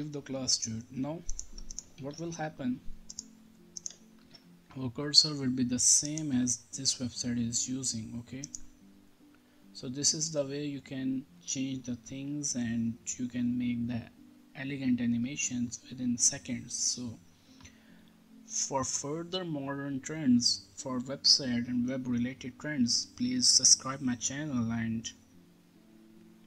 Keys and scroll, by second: 2.0 ctrl+s, 4.2 ctrl+r.